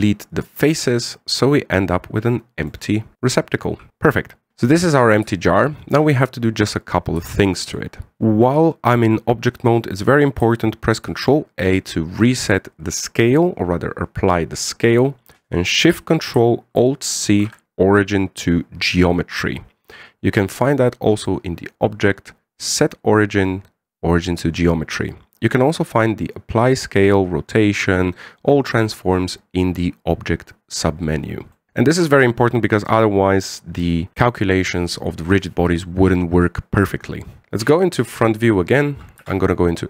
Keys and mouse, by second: 1.6-3.1 middle drag, 4.4 Tab, 4.8 KP_1, 6.1 shift+middle drag, 8.1 shift+Tab, 8.1 shift+middle click, 11.8 ctrl+a, 17.9 ctrl+alt+shift+c, 21.9-31.7 drag, 31.7-32.1 middle drag, 32.5-33.2 middle drag, 38.4 KP_1.